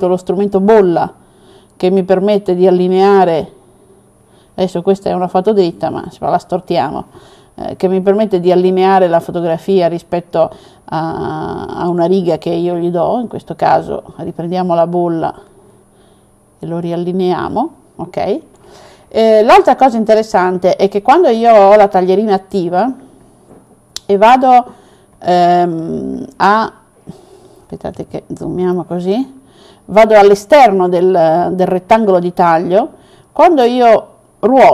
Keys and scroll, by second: 27.7 super+-, 28.2 super+-.